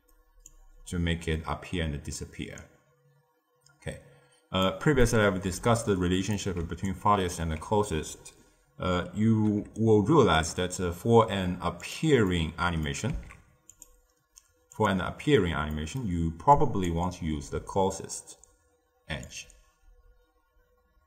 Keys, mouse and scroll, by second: 0.4-3.4 drag, 4.9-6.5 middle drag, 6.5 d, 6.8 click, 7.3 d, 9.5 d, 9.7-10.3 right drag, 10.3 d, 10.9-11.7 scroll down 1, 11.7 click, 12.2-13.0 middle drag, 13.0 z, 14.6 click, 15.6-16.5 middle drag, 16.5 click, 16.9-19.2 middle drag, 19.2-21.0 drag.